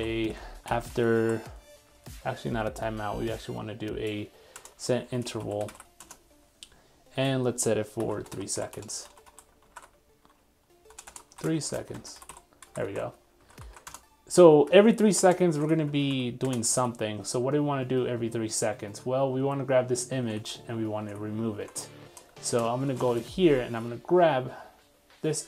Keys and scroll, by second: 9.7 super+s, 15.5 super+s, 15.7 super+Tab, 16.8 super+Tab, 20.3 super+Tab, 23.7 super+1.